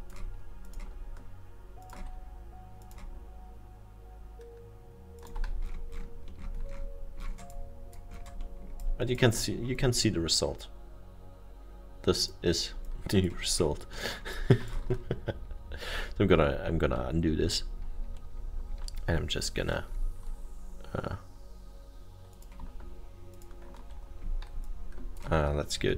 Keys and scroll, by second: 14.1 alt+7, 15.1 ctrl+z, 15.7 ctrl+z, 16.0 ctrl+z, 16.2 ctrl+z, 16.3 ctrl+z, 16.7 ctrl+z, 17.4 ctrl+z, 17.7 ctrl+z, 17.9 ctrl+z, 18.3 ctrl+z, 18.5 ctrl+z, 18.7 ctrl+z, 19.3 ctrl+z, 20.8 ctrl+z.